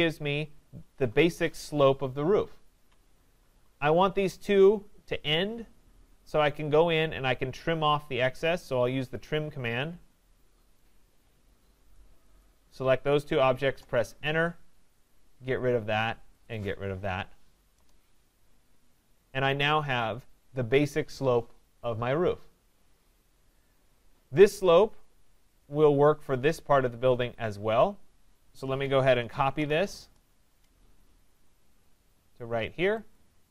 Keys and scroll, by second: 13.6 Return, 30.0 Return.